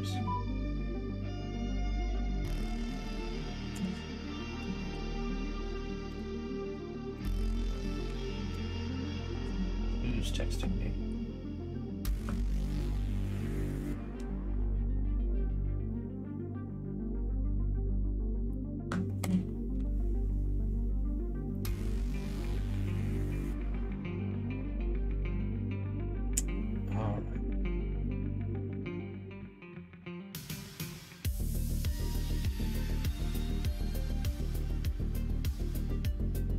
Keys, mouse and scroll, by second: 6.0-20.1 drag, 31.1-33.4 middle drag, 34.0-36.5 middle drag.